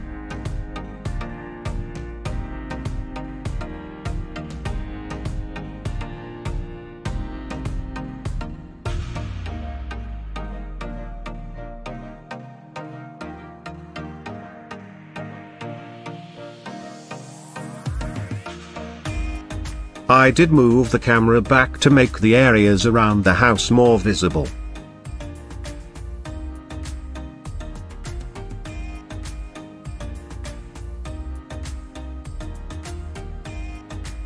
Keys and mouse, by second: 0.5 g, 0.8 z, 3.2 click, 3.6-5.8 middle drag, 6.2 KP_0, 8.6 s, 9.7 click, 9.9 s, 10.9 click, 11.5 g, 11.7 z, 12.4 click, 14.0 click, 16.6 g, 16.8 y, 21.5 shift+click, 27.4 Tab, 28.0 click, 29.4 middle drag, 30.2-30.6 middle drag, 31.2 g, 31.4 y.